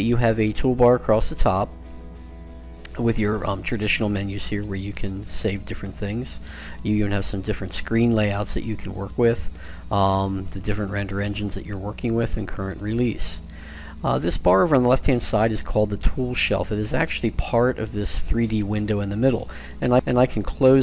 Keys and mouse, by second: 3.5-6.4 drag, 10.6-12.4 drag, 19.7 click.